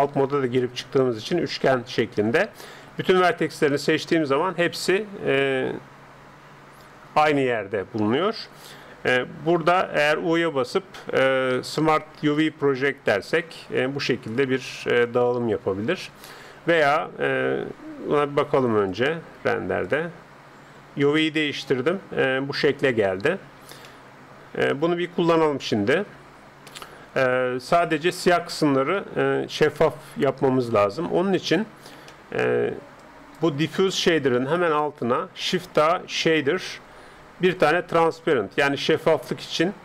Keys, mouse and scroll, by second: 2.9 a, 10.1 u, 18.1 Tab, 19.0-20.9 drag, 21.2-22.6 scroll up 1, 22.6-27.7 middle drag, 27.9 middle click, 28.7-29.8 middle drag, 30.0-31.8 middle drag, 33.0 middle click, 33.0-35.6 drag, 35.6 shift+a.